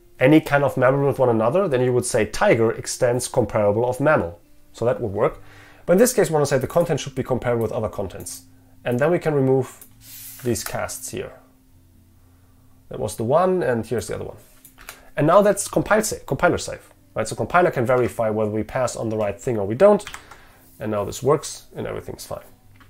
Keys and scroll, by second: 18.1 ctrl+Tab, 20.1 ctrl+F5.